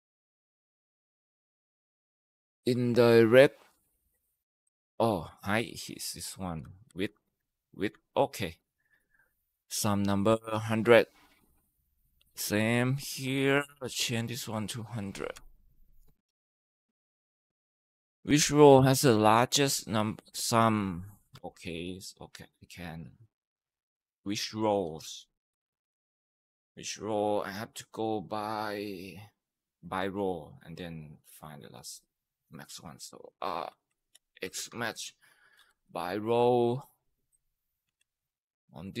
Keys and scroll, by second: 5.4 ,, 6.3 Right, 6.7 Right, 6.9 Right, 7.7 Tab, 15.2 0, 15.4 Right, 15.5 Right, 15.7 Right, 16.6 Tab, 21.5 =, 33.5-36.2 typing, 36.3 Tab, 37.8 ctrl+v, 37.8 ctrl+b, 38.4-39.0 typing.